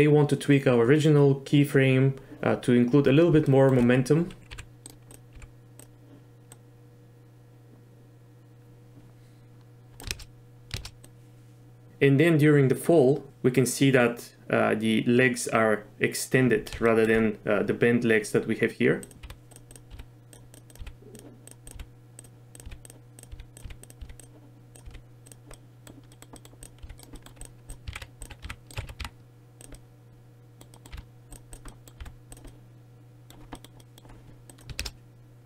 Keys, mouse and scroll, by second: 3.5 shift+middle drag, 4.6 g, 5.4 g, 6.5-10.0 drag, 10.2 shift+space, 10.8 shift+space, 11.1-11.9 drag, 17.0 shift+middle drag, 19.1 click, 19.3-24.9 typing, 19.7 click, 20.6 click, 21.5 click, 23.6 click, 24.8 click, 25.6 drag, 25.6 middle drag, 26.2 middle click, 26.4 click, 26.8 r, 27.2 click, 27.7 drag, 28.4 r, 28.9 r, 29.0 r, 29.8 drag, 30.0 middle click, 30.8 middle click, 30.9 r, 31.7 middle click, 32.0 r, 32.5 drag, 32.6-33.3 middle drag, 33.6 middle click, 33.8 middle click, 34.5 drag, 34.8 shift+space.